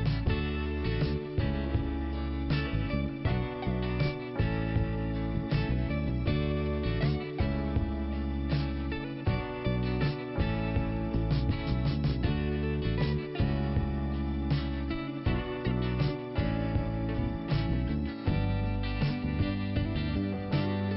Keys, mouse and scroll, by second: 0.6 click, 0.7 click, 1.6 click, 1.9 click, 5.3 scroll up 2, 6.2 click, 7.0 click, 9.2 click, 10.5 middle click, 11.4 scroll up 2, 12.0 click, 15.1 click, 15.2 click, 15.7-16.0 scroll down 1, 16.0 middle click, 17.1 scroll up 1, 18.3 click, 18.4 click.